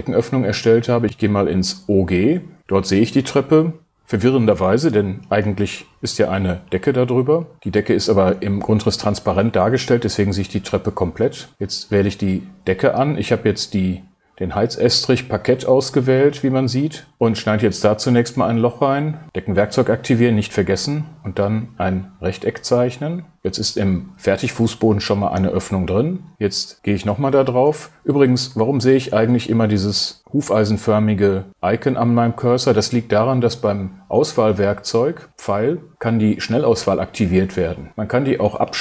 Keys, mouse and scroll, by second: 1.0 super+6.